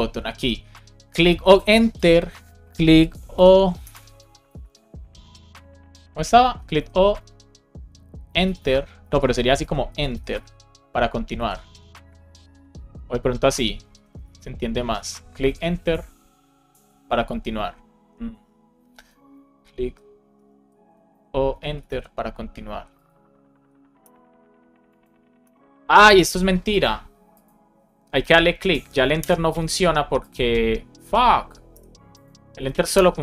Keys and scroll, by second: 3.7 BackSpace, 3.8 space, 4.4 BackSpace, 6.5 space, 8.9 BackSpace, 9.9 shift+e, 11.3 super+s, 13.8 BackSpace, 15.3 super+s, 19.0 BackSpace, 19.2 space, 20.5 BackSpace, 20.8 space, 21.4 space, 21.8 super+s, 23.9 Return, 25.3 Return, 25.9 Return, 29.1 Return, 31.6 BackSpace.